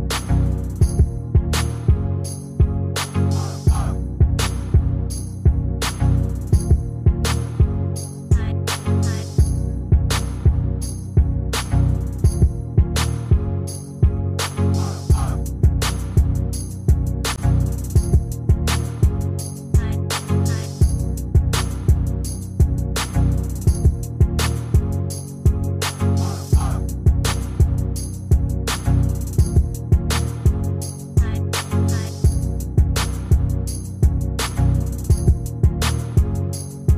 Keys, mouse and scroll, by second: 8.5 shift+click, 8.8 shift+click, 9.2 shift+click, 9.3 shift+double click, 10.1 shift+click.